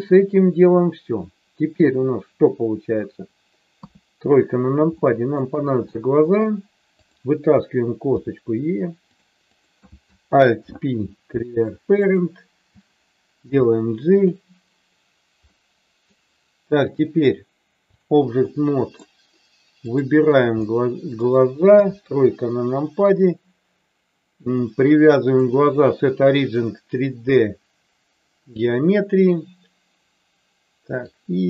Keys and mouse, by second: 3.7 KP_3, 5.0 shift+middle click, 6.0 shift+middle click, 7.0 click, 8.1 e, 9.4 click, 10.6 alt+p, 13.4 g, 14.1 click, 15.4 middle click, 16.8-18.0 drag, 18.4-19.0 middle drag, 19.7 click, 20.6 middle click, 21.7 KP_3, 25.3-28.6 drag, 31.1-31.4 drag.